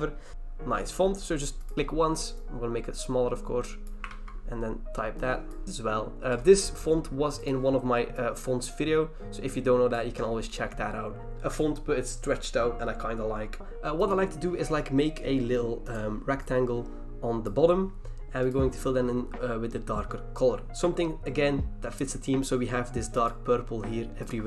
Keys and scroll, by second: 0.3 ctrl+c, 4.1 ctrl+v.